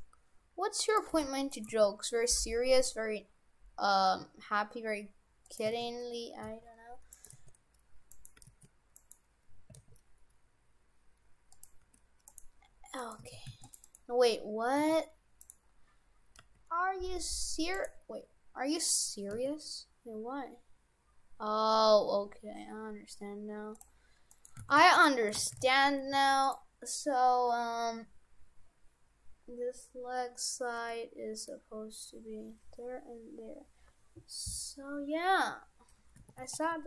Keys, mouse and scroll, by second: 1.1 g, 1.7 g, 5.8 shift+d, 6.4 s, 7.3 g, 8.4 g, 9.7 s, 11.8 g, 13.0 right click, 13.3 shift+f, 13.9 right click, 14.7 s, 15.7-16.1 scroll down 4, 16.4 g, 18.6-19.3 scroll up 4, 19.3 s, 24.3 right click, 24.6 shift+f, 25.4 shift+f, 26.9 right click, 30.9 middle click, 31.8 scroll down 1, 36.2 shift+f.